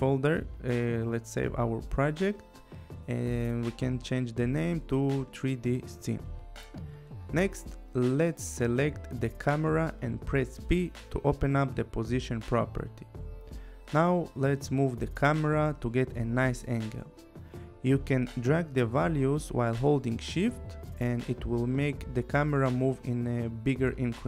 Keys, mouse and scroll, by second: 0.6 click, 2.0-4.7 typing, 5.9 click, 12.0 click, 12.9 p, 14.5 click, 17.5 shift+click, 20.2 shift+click.